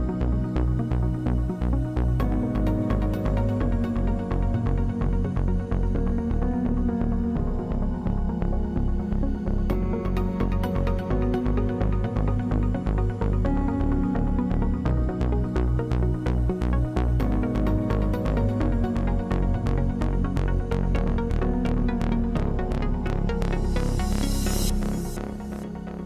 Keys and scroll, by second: 10.1 space, 11.4 space, 22.6 space, 24.2 space.